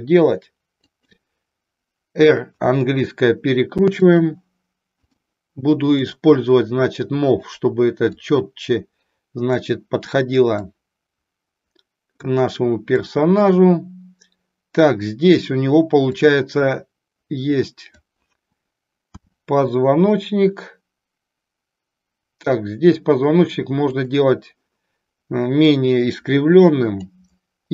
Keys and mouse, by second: 1.0 click, 2.5 r, 4.0 click, 5.0 click, 6.0-7.5 drag, 8.1-9.8 drag, 10.6-12.1 drag, 13.0-15.4 drag, 16.0-17.9 drag, 19.1 r, 24.0 click, 25.8-27.0 drag.